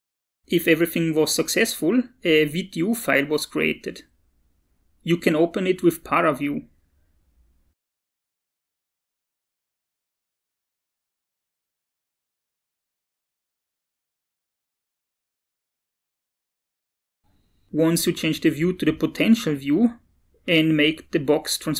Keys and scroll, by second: 6.7 alt+Tab, 7.5-12.9 typing.